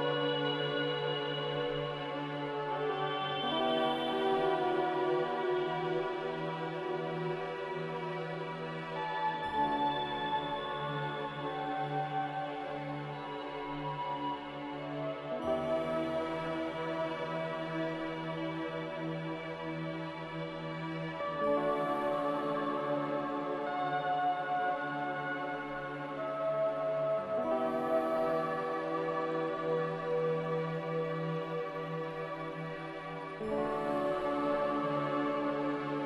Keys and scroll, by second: 2.9 z, 16.6 a, 18.9-19.8 typing, 20.4 Return, 24.6 typing, 25.3 Return, 33.4-33.7 typing, 34.4 Return.